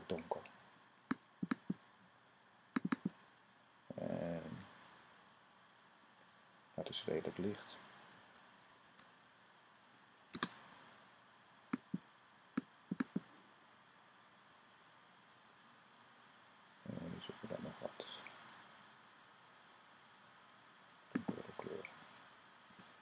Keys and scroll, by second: 8.5 super+z, 10.2 super+z, 22.5 ;.